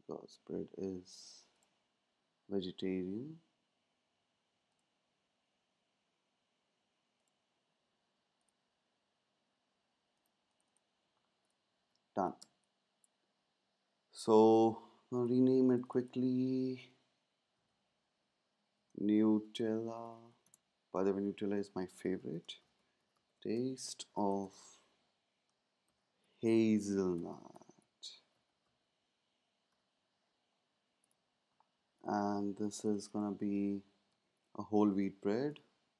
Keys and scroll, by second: 12.4 space, 17.5 super+a, 18.8-20.7 typing, 21.9-24.7 typing, 25.8-29.7 typing, 34.0 super+a, 34.5-35.9 typing.